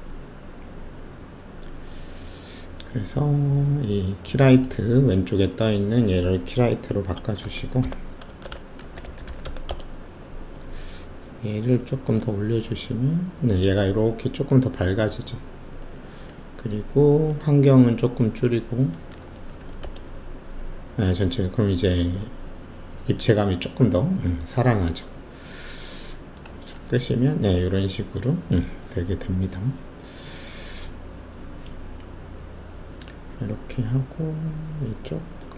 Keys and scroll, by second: 6.8-9.6 typing, 9.6 Return, 19.5 2, 19.8 Return.